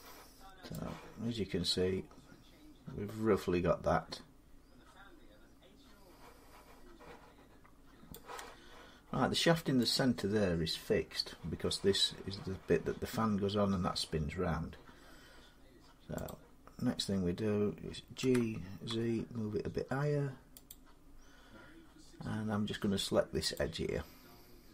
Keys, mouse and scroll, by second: 4.2 middle click, 7.9-14.8 drag, 16.1 click, 16.6 middle click, 16.6 middle click, 16.7 middle click, 18.0-18.7 typing, 20.5 click, 21.8-22.3 scroll, 23.4 click, 24.5 Tab.